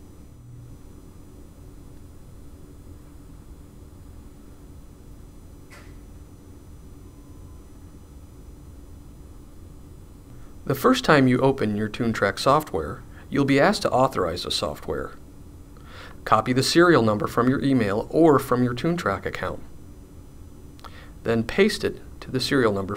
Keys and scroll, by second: 19.2 super+c.